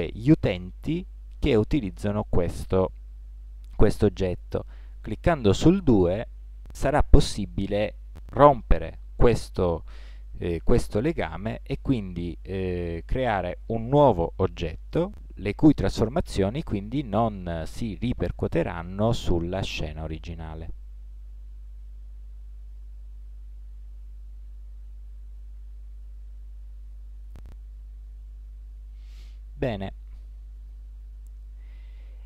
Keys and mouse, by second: 12.7 g, 16.0 click, 16.2-18.6 drag.